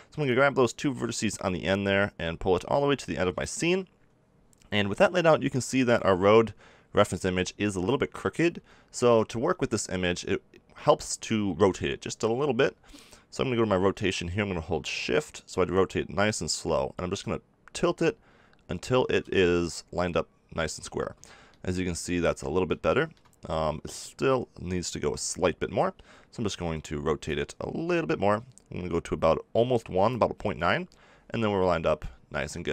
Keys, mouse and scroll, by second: 0.2-2.1 drag, 2.1-5.8 right drag, 6.2-8.5 middle drag, 8.5 n, 15.1-16.8 drag, 16.9-19.2 middle drag, 19.2 z, 32.3 Tab.